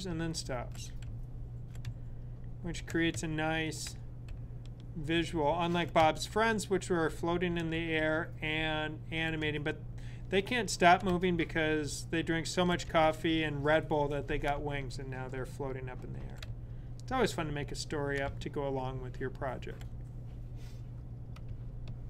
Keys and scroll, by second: 0.9 Right, 1.7 Left, 3.0 Left, 4.1 Right, 5.9 Left, 7.6 Right, 9.3 Left, 10.9 Right, 12.7 typing, 14.4 typing, 16.3 typing, 18.1 typing.